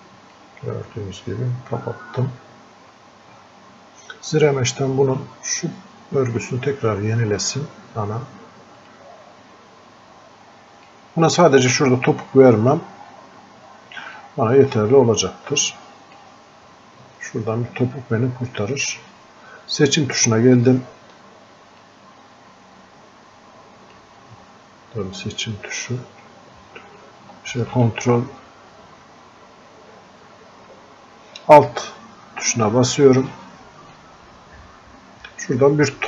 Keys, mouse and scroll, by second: 0.4-3.5 drag, 8.8-11.7 drag, 11.7-13.1 drag, 13.1-13.4 scroll up 1, 14.2-17.8 drag, 17.8-18.3 scroll down 1, 21.9-31.9 ctrl+drag, 26.9 ctrl+Num_Lock, 34.0-36.0 alt+drag.